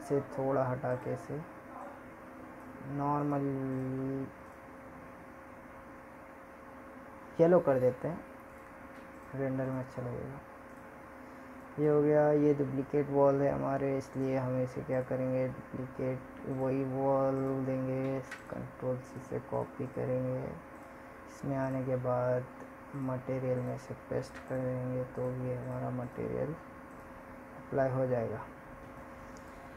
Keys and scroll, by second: 14.6 ctrl+c, 20.6 ctrl+v.